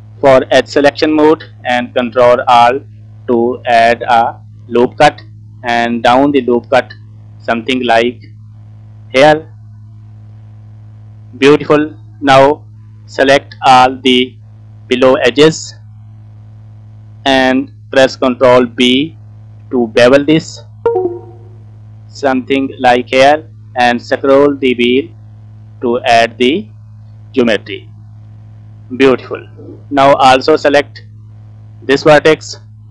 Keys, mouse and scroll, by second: 1.4-1.8 scroll down 1, 2.5 ctrl+r, 9.5 scroll down 1, 9.6-10.7 middle drag, 10.8 scroll up 1, 11.2 scroll down 1, 11.2 middle click, 12.0 scroll up 3, 12.4 middle click, 13.2 click, 16.1 alt+click, 16.2 alt+click, 16.8 scroll down 1, 17.0 middle click, 19.0 ctrl+b, 27.7 middle click, 28.2 scroll down 2, 28.5 middle click, 29.5-30.1 scroll up 3, 30.5 click, 31.1-32.1 middle drag, 32.1 click, 32.2 middle click.